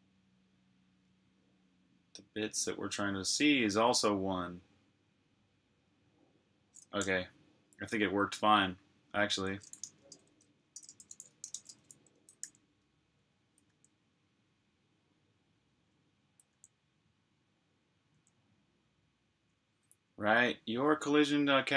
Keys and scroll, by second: 9.5-12.0 typing, 12.3 super+j, 16.5 super+j.